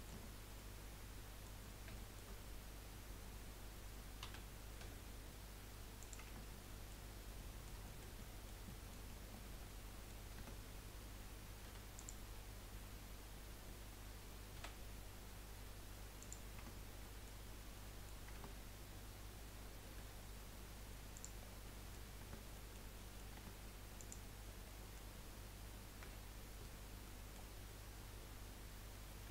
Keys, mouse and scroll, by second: 0.2 Tab, 0.6-1.6 middle drag, 1.6-1.9 scroll up 2, 1.9 shift+middle click, 2.3 scroll up 2, 4.2 s, 6.4 Tab, 6.8 middle click, 7.1-7.5 scroll down 3, 7.9 shift+middle click, 8.2 middle click, 8.9 middle click, 9.1 scroll down 4, 9.3-10.4 middle drag, 10.4 Tab, 11.7 3, 11.9 click, 12.4-13.8 scroll up 2, 13.8-14.4 scroll up 2, 14.5 s, 16.6 Tab, 17.0-17.5 middle drag, 17.5 scroll down 2, 17.7-18.3 middle drag, 18.3 Tab, 19.9 Delete, 21.4 scroll down 3, 21.6 middle click, 22.2 Tab, 22.5 middle click, 23.4 Tab, 24.0 click, 24.7-26.0 middle drag, 26.0 l, 27.0-29.3 middle drag.